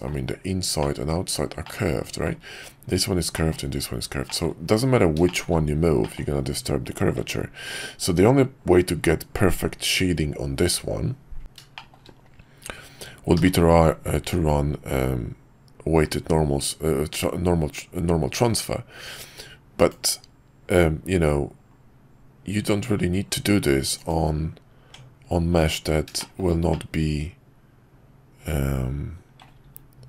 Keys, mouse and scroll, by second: 0.9 middle click, 1.6 middle click, 3.4 middle click, 4.3 middle click, 5.3 shift+middle click, 6.0 middle click, 7.1 Tab, 11.7 shift+middle click, 24.8 Tab, 26.2 middle drag, 26.7-29.4 middle drag.